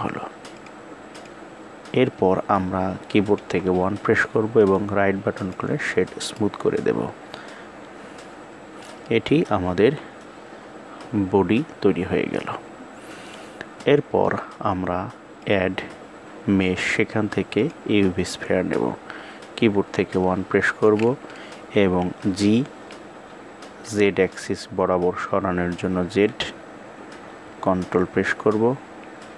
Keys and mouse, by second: 0.1 click, 2.9 KP_1, 4.2 right click, 5.9-8.4 middle drag, 9.3 KP_1, 13.3-13.7 middle drag, 15.0-17.2 drag, 19.3 KP_1, 21.7 g.